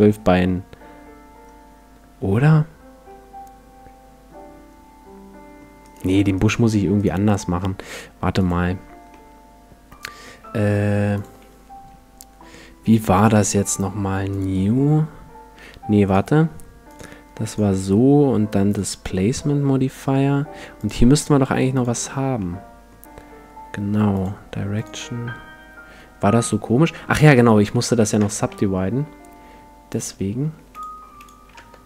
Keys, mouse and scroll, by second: 5.8-8.8 right drag, 8.4-10.0 drag, 9.1-11.0 middle drag, 11.2-13.0 drag, 13.2-19.4 drag, 20.8-22.8 drag, 22.4-24.2 middle drag, 24.2-26.2 drag, 27.6 w, 28.2 Tab, 29.4 w, 30.5 w, 31.1 w, 31.6 Tab.